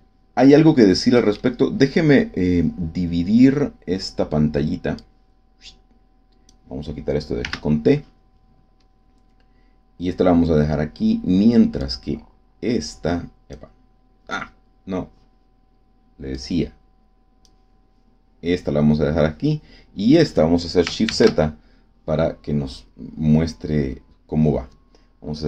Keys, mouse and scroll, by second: 0.5-1.5 middle drag, 4.9-6.6 drag, 7.3 t, 8.8-9.3 scroll up 2, 9.5 scroll down 2, 11.7-13.7 drag, 16.3-17.6 drag, 21.0 shift+z.